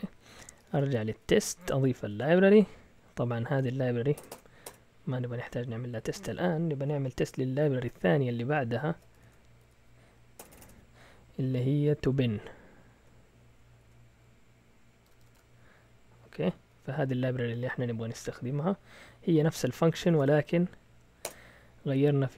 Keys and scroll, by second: 0.2-1.9 typing, 2.1 Return, 2.7 Down, 3.1 Down, 3.9-5.1 typing, 8.9-10.6 typing, 11.8-13.8 typing, 15.0 typing, 16.5 typing, 19.8 Escape, 19.8-20.7 typing, 21.2 Return.